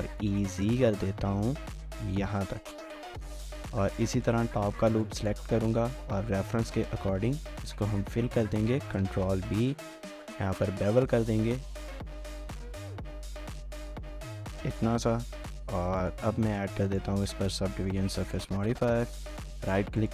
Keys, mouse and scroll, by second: 0.0-1.1 typing, 3.0 scroll down 1, 3.2 shift+middle click, 4.2 alt+click, 4.7 scroll up 1, 4.9-6.2 typing, 9.0 ctrl+b, 14.2 Tab, 14.7 typing, 15.3 middle click, 18.8 middle click, 19.4 middle click, 19.4 right click.